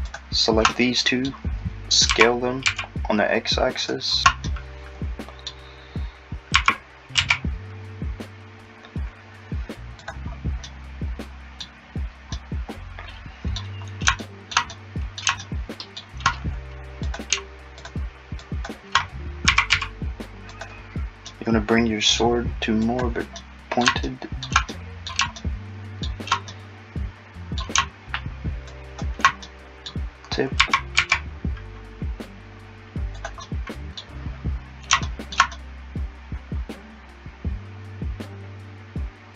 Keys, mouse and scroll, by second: 0.1 shift+click, 0.7 middle click, 2.1 s, 4.1 scroll up 2, 4.2 shift+click, 4.5 middle click, 6.6 s, 17.1 click, 17.8 shift+click, 18.4 shift+click, 19.5 s, 21.3 middle click, 22.9 click, 23.4 middle click, 28.7 shift+click, 29.4 middle click, 30.6 s, 33.5 middle click.